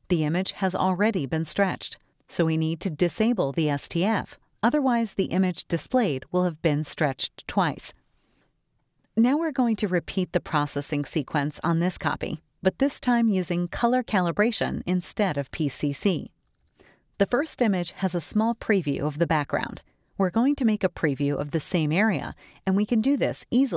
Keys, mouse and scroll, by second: 4.1 click, 9.4 click, 13.1-17.1 drag, 20.9 click, 22.7 click, 23.6-23.7 drag.